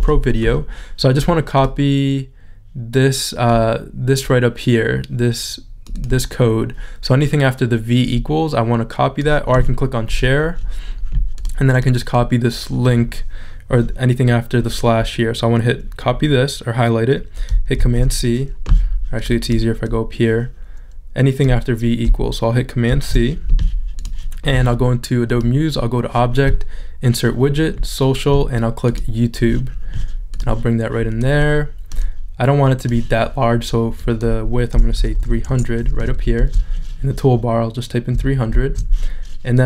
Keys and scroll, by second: 35.0 3, 36.3 shift+super+z, 38.5 shift+super+z.